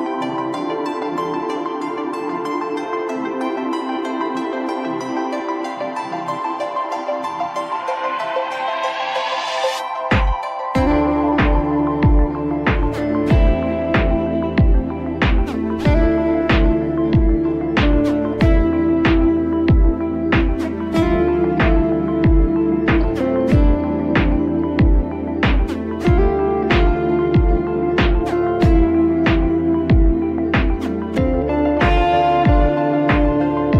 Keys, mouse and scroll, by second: 2.2 click, 3.0 click, 5.5 drag, 10.1 middle click, 10.5-11.3 scroll up 1, 11.3 z, 13.8-19.3 middle drag, 19.3 click, 20.1 Tab, 20.8-21.5 scroll up 1, 22.2-23.3 drag, 24.4 click, 25.4 click, 26.1 shift+click, 26.5 shift+click, 28.7 u, 31.1 scroll up 2, 31.3 scroll down 1, 31.9-33.1 shift+middle drag, 33.1-33.7 drag.